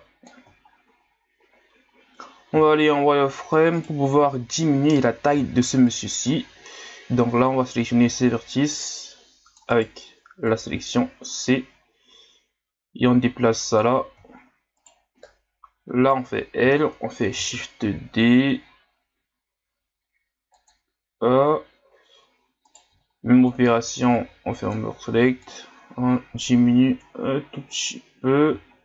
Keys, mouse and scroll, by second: 0.7-2.5 shift+scroll down 1, 2.5 z, 3.8 right click, 5.3 c, 10.5-13.4 drag, 14.3 scroll up 5, 14.8 right click, 15.8 l, 16.8-17.4 shift+scroll up 1, 17.4 shift+d, 22.6 right click, 22.9 b, 25.4-28.7 drag, 28.7 shift+scroll down 4.